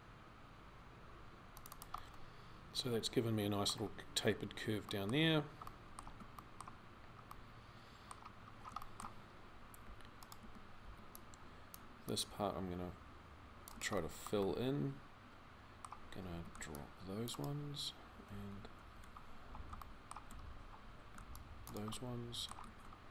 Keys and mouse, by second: 9.7 c, 10.2 a, 10.6 c, 15.4-18.1 middle drag, 18.1 c, 20.8 c, 22.4 z.